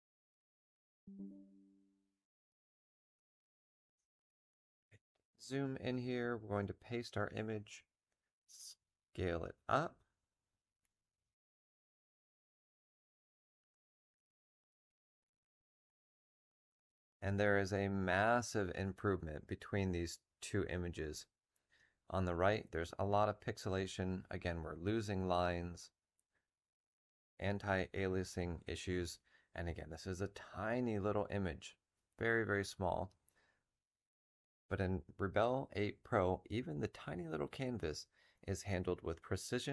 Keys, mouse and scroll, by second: 6.7 v, 6.9-15.3 drag.